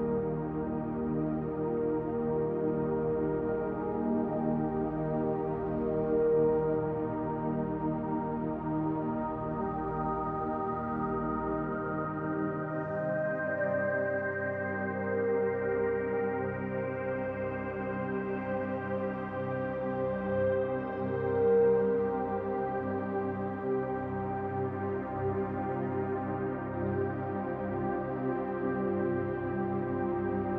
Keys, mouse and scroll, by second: 0.9 click, 1.5 click, 2.1 shift+click, 2.3 shift+click, 2.7 middle click, 3.5 click, 5.3 l, 6.5 shift+d, 7.3 click, 9.3 r, 11.7 click, 14.2 middle click, 15.1 KP_7, 16.4-17.3 scroll down 4, 18.2 shift+middle click, 19.9 click, 20.5-21.3 scroll up 1, 21.3-21.8 scroll up 2, 21.8 s, 23.2 click, 24.9 click, 26.3 l, 27.0 shift+d, 27.8 click, 29.0 r.